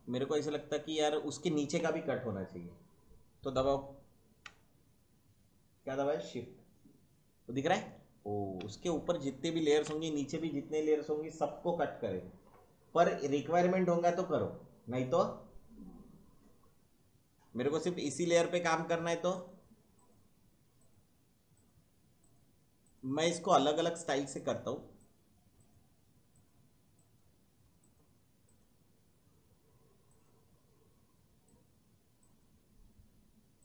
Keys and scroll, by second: 9.7 ctrl+z.